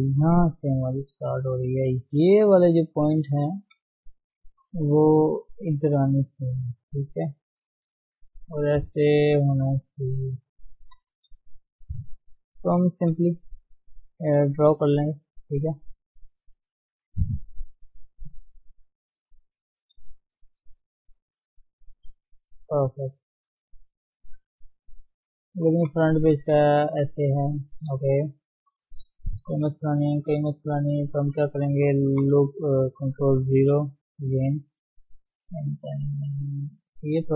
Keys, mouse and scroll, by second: 0.4 shift+z, 1.0 scroll down 2, 1.2-3.9 middle drag, 3.9 KP_3, 4.7 shift+z, 6.4-11.4 drag, 11.4 shift+z, 11.6 shift+middle click, 12.0 shift+z, 12.5 shift+middle click, 12.9-13.2 scroll up 2, 13.2-14.8 shift+middle drag, 14.8-16.0 drag, 16.0 d, 16.4-17.9 drag, 17.9 shift+middle click, 18.1-20.6 shift+middle drag, 20.6-25.8 drag, 25.8 KP_1, 26.1 scroll down 3, 27.0 shift+middle click, 27.7-28.0 scroll up 1, 28.0 shift+middle click, 28.3-29.1 scroll up 2, 28.6 shift+middle click, 29.2 shift+z, 29.5-31.3 middle drag, 31.3 Tab, 32.5 ctrl+0, 33.2 KP_3, 34.1 Tab, 35.7-37.3 middle drag.